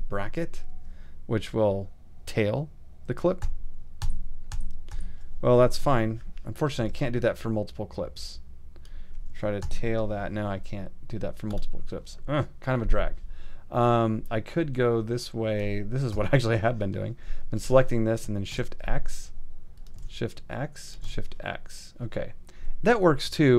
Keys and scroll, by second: 3.4 alt+], 5.8 alt+super+], 5.9 alt+super+z, 9.6 alt+], 16.1 ', 18.5 shift+x, 21.0 shift+x.